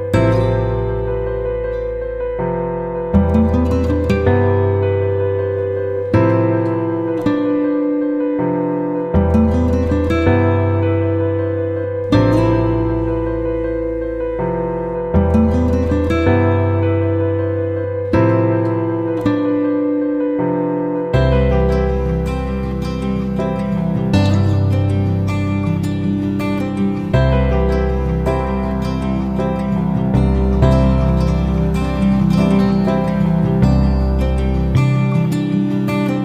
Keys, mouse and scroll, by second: 27.2 Down, 27.3 Down, 27.6 Right, 28.7 click, 31.1 Right, 31.9-36.2 drag.